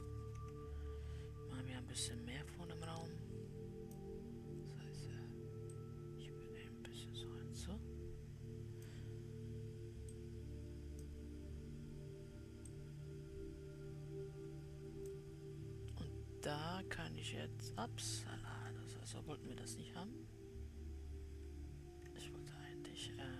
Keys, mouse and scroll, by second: 0.5 Tab, 3.4 click, 6.2-9.2 drag, 10.5-15.9 drag, 16.4-18.4 middle drag, 18.4-21.2 scroll up 1, 21.2 ctrl+z, 21.8 ctrl+z.